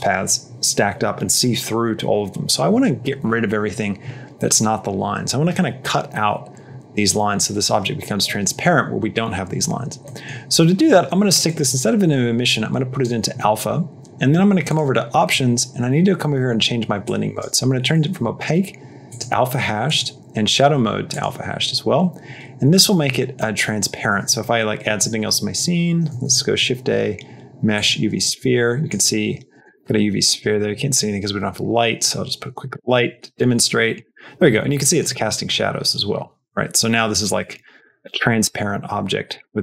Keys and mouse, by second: 9.9 middle click, 11.4-12.9 drag, 14.5 click, 16.9 click, 17.8-19.1 drag, 19.7-21.1 drag, 24.7 shift+a, 27.7 shift+a, 28.2 g, 29.1 g, 29.8 s, 30.8 shift+a, 32.8 r, 35.0 g, 37.9 x.